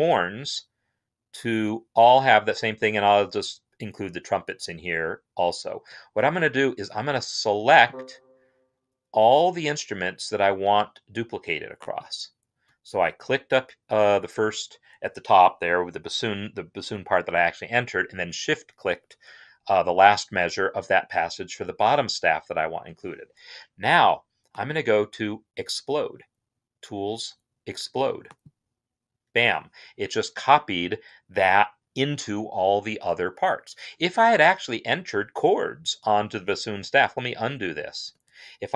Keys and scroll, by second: 37.9 ctrl+z.